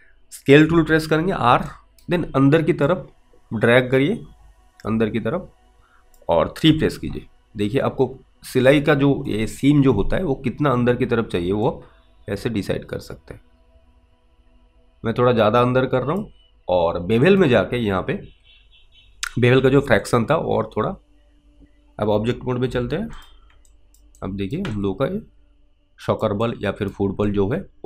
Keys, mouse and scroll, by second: 0.7 r, 2.0 alt+right click, 3.2 click, 12.0 click, 17.4 click, 20.4 ctrl+click, 21.6 alt+right click, 22.7 F8, 23.2 click, 24.2 alt+click, 24.5 alt+right click, 25.1 alt+click, 26.8 alt+right click, 27.6 alt+click.